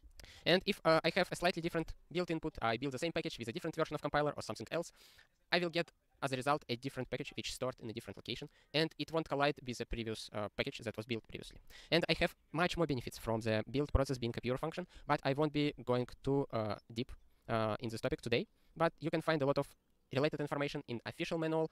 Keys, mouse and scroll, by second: 0.4 ctrl+a, 0.6 ctrl+space, 0.9 ctrl+g, 1.0 ctrl+n, 1.1 ctrl+space, 1.2 ctrl+n, 1.7 ctrl+g.